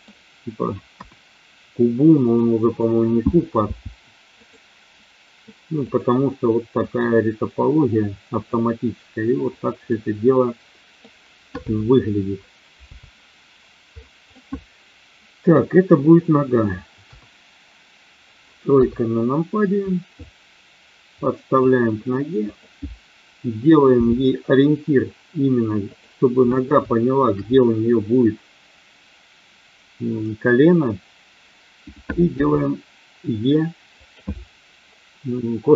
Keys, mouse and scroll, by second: 0.9 KP_1, 2.1 click, 3.5 g, 4.4 click, 5.8 click, 6.8-8.4 drag, 9.9-11.1 middle drag, 14.3-15.5 middle drag, 16.9 KP_1, 18.8 KP_3, 20.3-21.5 drag, 22.4 click, 23.9 g, 25.9 click, 26.9 shift+middle click, 32.3 e, 34.0 click.